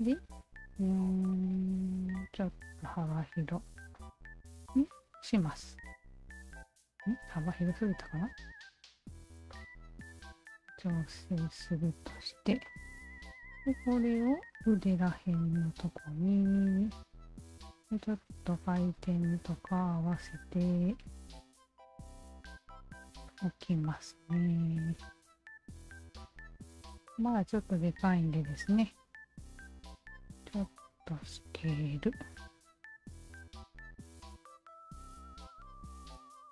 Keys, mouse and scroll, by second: 0.4-3.4 drag, 3.9 alt+click, 5.1 Tab, 5.5-5.9 alt+drag, 6.5 w, 6.8 alt+click, 7.7 alt+middle drag, 8.4-9.3 alt+drag, 9.5 alt+click, 10.4-10.8 alt+middle drag, 11.5-12.4 alt+drag, 12.6-13.1 alt+drag, 13.4-13.8 alt+middle drag, 13.8 alt+right click, 14.7 e, 15.8-17.8 drag, 18.1 w, 18.5 alt+middle drag, 18.8-19.7 alt+drag, 20.1 e, 21.0-22.4 alt+drag, 23.0 w, 23.3-24.0 alt+drag, 24.6-25.9 alt+drag, 26.2-28.2 alt+drag, 28.6 r, 29.4-31.6 alt+shift+drag, 32.0 w, 32.4 alt+click, 33.4 alt+click, 34.3-36.5 alt+drag.